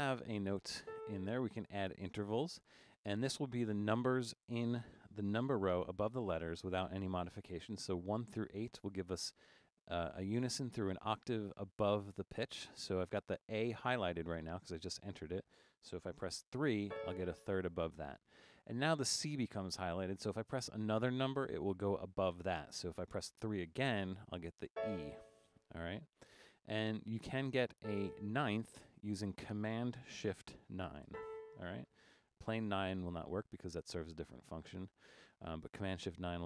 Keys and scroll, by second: 0.0 Down, 0.2 Down, 0.8 a, 16.9 3, 24.7 3, 27.9 a, 31.1 shift+super+9.